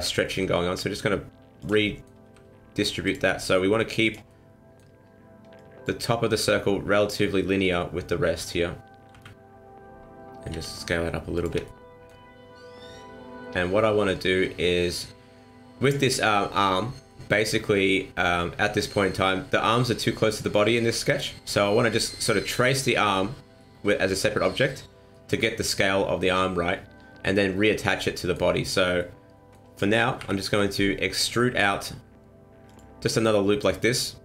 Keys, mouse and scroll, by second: 0.3 r, 1.8 middle click, 2.2 r, 3.4 r, 4.2 middle click, 5.5 click, 7.3 m, 7.7 middle click, 9.1 KP_1, 10.5 s, 11.6 shift+middle click, 15.0 scroll down 2, 17.1 shift+middle click, 21.4-23.2 scroll up 2, 23.3 scroll down 1, 23.6 shift+middle click, 25.1 shift+middle click, 26.7-27.0 scroll down 1, 27.0-28.0 scroll up 1, 28.0 shift+middle click, 29.0 middle click, 30.2 KP_1, 31.4 e.